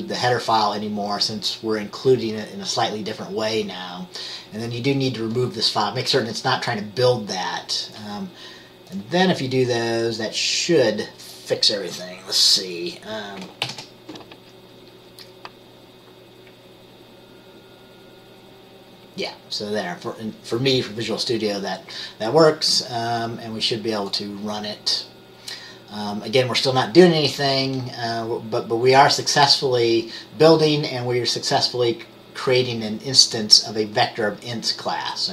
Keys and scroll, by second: 13.8 ctrl+b.